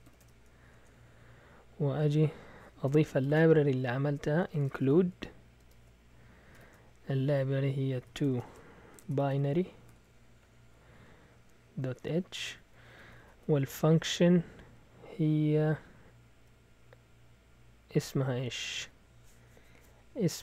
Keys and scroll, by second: 0.2 Tab, 0.7 Return, 1.9 Down, 2.1 Down, 2.8-6.5 typing, 7.7-10.4 typing, 11.6-14.3 typing, 15.8 Right, 15.9-16.3 typing, 18.5 typing.